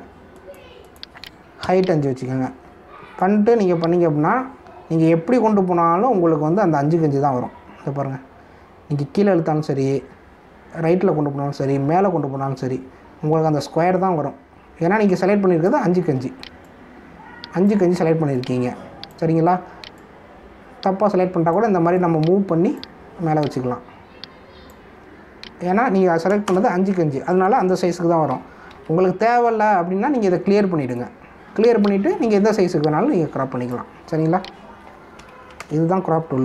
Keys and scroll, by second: 0.0 5, 27.4 ctrl+Return, 29.7 ctrl+z.